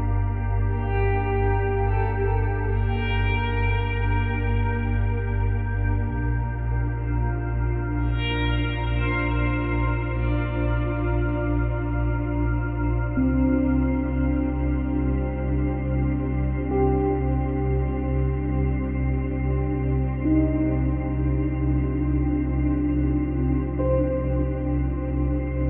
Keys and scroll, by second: 11.8 Delete, 21.0 space.